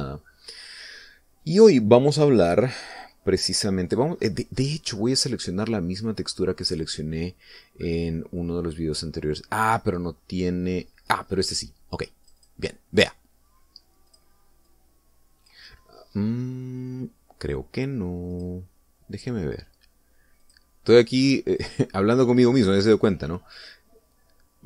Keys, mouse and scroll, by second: 0.8 click, 1.7 scroll up 1, 1.8-3.2 scroll down 4, 3.7 scroll down 1, 4.5-5.4 scroll down 3, 5.5-7.7 scroll up 10, 8.4-9.3 scroll down 4, 13.6 click, 15.4 click, 16.0-17.0 drag, 19.7 click, 21.8 click, 22.9 click.